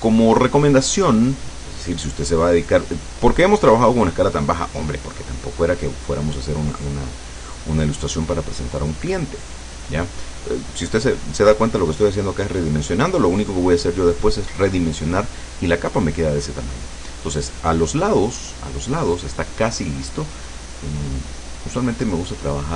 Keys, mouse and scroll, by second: 1.5-4.1 drag, 4.4 click, 5.5-8.6 drag, 13.8 click, 20.7-22.7 drag.